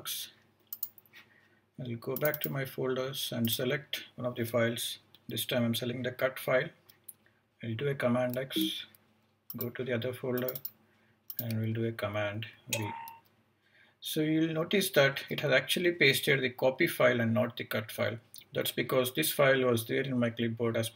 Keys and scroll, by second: 8.3 super+x, 12.5 super+v.